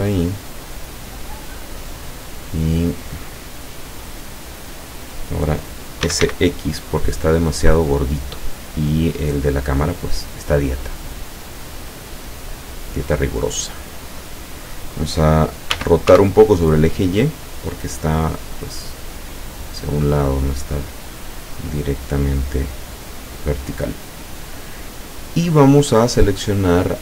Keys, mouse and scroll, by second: 0.3 middle click, 1.8 scroll down 1, 2.1 middle click, 2.4 middle click, 3.0-4.0 middle drag, 4.1-4.7 scroll up 2, 6.1 s, 6.3 x, 14.2 click, 15.8 r, 16.1 y, 20.1 click, 23.3 click.